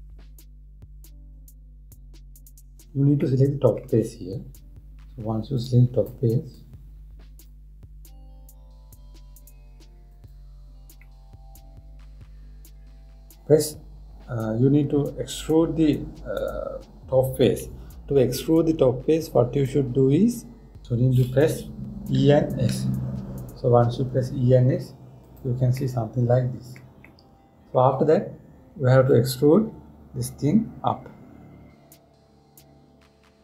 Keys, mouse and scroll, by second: 3.9-5.0 middle drag, 5.0 scroll up 1, 5.1 scroll down 1, 5.3 scroll up 1, 5.6-6.6 scroll down 1, 6.6 click, 7.2-8.4 drag, 8.4 scroll down 1, 9.2 scroll up 1, 9.4 scroll down 1, 9.9-10.6 scroll up 1, 10.7 click, 11.7-14.8 middle drag, 22.8 e, 26.4-30.3 middle drag, 30.3 e.